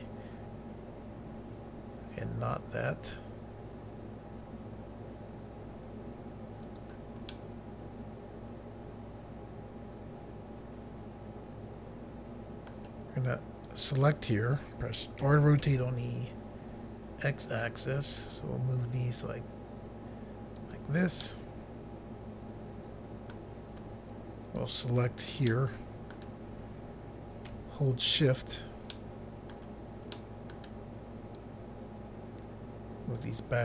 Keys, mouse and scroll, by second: 6.6 right click, 7.3 middle click, 13.7 click, 15.3-15.6 typing, 20.6 click, 21.2 middle click, 24.6 click, 25.5 middle click, 28.1 shift+click, 29.0 middle click, 30.2 middle click, 31.4 click.